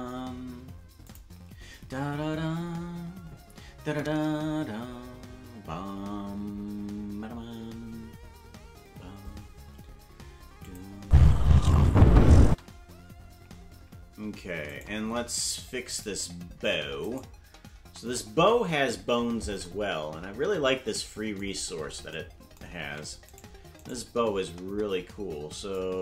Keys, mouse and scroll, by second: 10.7 click, 11.0 space, 12.5 space, 14.8 right click, 16.0 right click, 16.6 ctrl+Tab, 17.1 right click, 18.9 KP_Decimal, 21.5-22.1 scroll down 7, 22.9 ctrl+Tab, 23.3 right click, 25.8-26.0 drag.